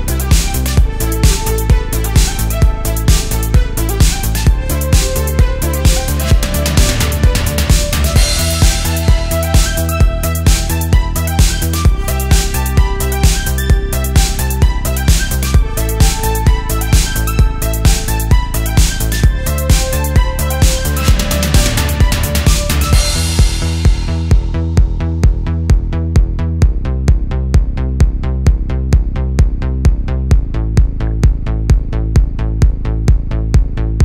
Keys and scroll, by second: 0.1 super+z, 0.3 super+z, 0.7 super+z, 1.9 super+z, 2.5 space, 7.0 super+z, 8.0 space, 8.8 space, 9.3 super+z, 9.5 alt+super+space, 11.8 super+z, 15.1 super+z, 16.1 space, 16.8 super+space, 17.3 super+z, 18.3 space, 19.1 space, 19.7 super+space, 21.8 space, 25.0 space, 29.1 alt+super+space, 31.0 space, 31.7 space, 32.1 space, 32.8 alt+super+space.